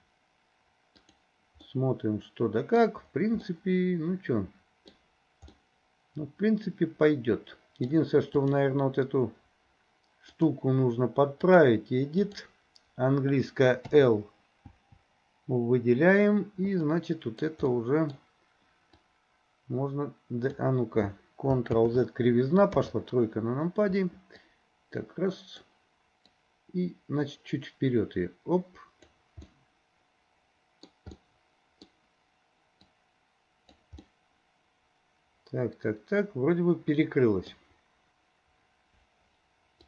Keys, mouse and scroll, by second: 1.1 click, 1.7-2.8 middle drag, 3.5-5.0 middle drag, 5.6-8.0 middle drag, 8.4 click, 10.4-11.7 drag, 12.3 click, 13.9 l, 14.8 l, 16.9 middle click, 17.7 middle click, 19.1-20.6 drag, 21.8 ctrl+z, 22.8 KP_3, 24.5-25.7 drag, 26.5-29.1 drag, 29.6-30.9 middle drag, 30.9 scroll down 1, 31.2 scroll up 1, 31.3 middle click, 32.8 click, 34.1 scroll up 1, 34.2-37.6 middle drag.